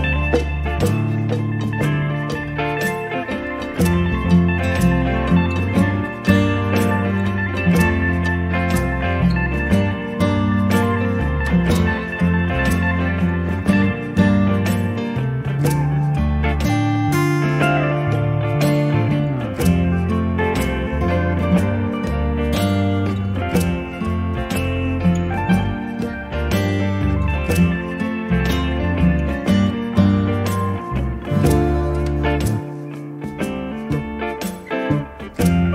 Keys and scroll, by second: 6.9 space, 25.8 b, 34.5 space.